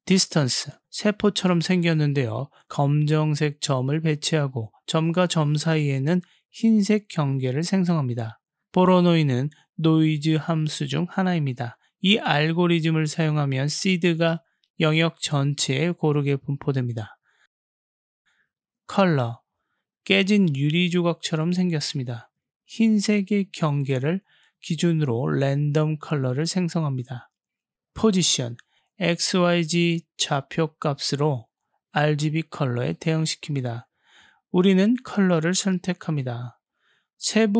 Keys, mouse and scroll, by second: 2.5-3.6 drag, 6.6-7.5 middle drag, 8.2-9.4 middle drag, 9.6-10.0 middle drag, 10.2-12.5 middle drag, 12.8-13.4 middle drag, 14.5 KP_7, 18.9-20.1 drag, 25.6 click, 25.9 click, 29.0 click, 29.2-30.0 drag, 35.2-36.1 drag.